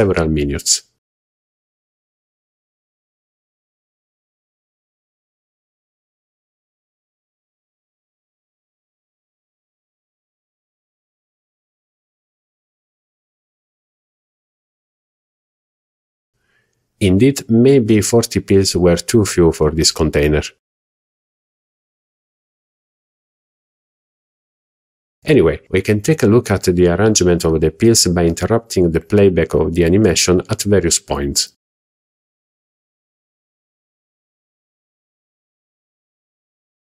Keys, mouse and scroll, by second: 4.2 click, 14.7 click, 15.2 click, 22.4-23.3 middle drag, 23.5 scroll down 2, 24.1-24.4 shift+middle drag, 24.6 middle click, 25.2 z, 27.0-27.5 middle drag, 28.1 scroll up 2, 29.1-29.6 middle drag, 29.1 scroll up 1, 30.1-30.4 shift+middle drag, 30.8 middle click, 34.4 click.